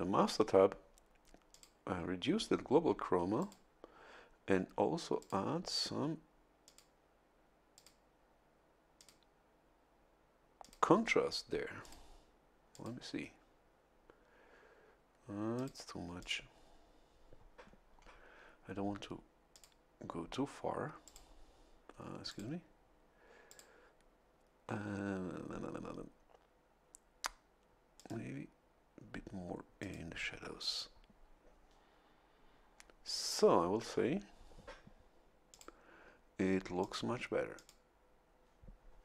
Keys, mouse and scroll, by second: 1.5 click, 3.4 click, 5.2 click, 6.6 click, 7.7 click, 8.9 click, 10.6 click, 11.8 click, 12.7 click, 15.5 click, 16.2 click, 19.5 click, 21.0 click, 22.3 click, 23.5 click, 27.9 click, 29.8 click, 33.3 scroll up 1, 35.5 click, 36.8 click, 37.5 click.